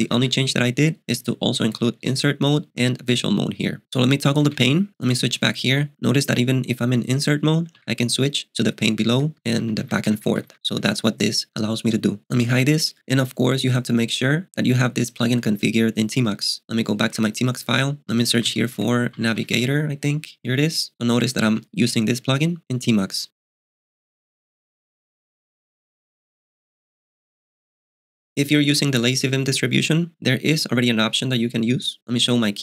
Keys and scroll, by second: 0.0-2.8 typing, 4.5 alt+t, 5.2 ctrl+k, 5.7 i, 7.8 ctrl+j, 8.6 ctrl+k, 9.2 ctrl+j, 9.3 ctrl+k, 9.4 ctrl+j, 9.6 ctrl+k, 9.8 ctrl+j, 10.0 ctrl+k, 10.1 ctrl+j, 10.3 ctrl+k, 10.4 ctrl+j, 10.8 ctrl+k, 12.5 alt+t, 17.0-20.0 typing, 21.5 ↻.